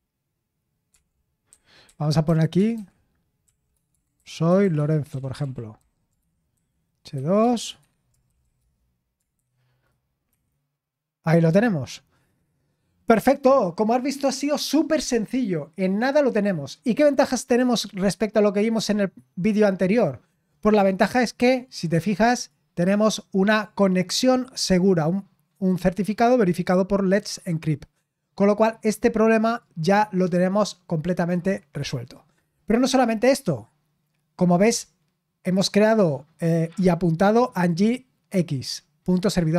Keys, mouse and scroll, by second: 0.0-12.3 typing, 22.3 click, 23.4 click, 29.5 click, 31.2 click.